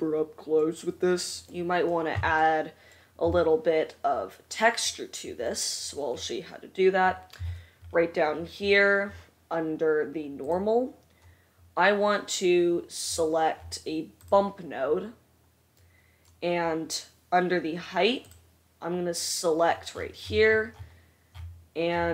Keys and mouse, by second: 16.0 click, 16.0 right click.